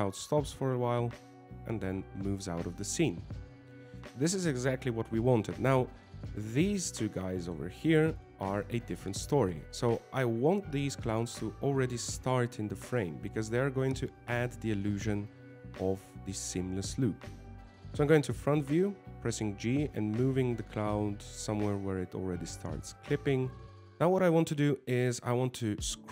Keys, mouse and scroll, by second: 4.6 alt+a, 5.7 click, 6.9 scroll down 2, 8.3 right click, 9.2 middle click, 9.9 w, 11.1 middle click, 14.0 KP_1, 14.9 scroll up 2, 15.2 shift+middle click, 17.7 g, 23.9 shift+middle click, 23.9 scroll down 1.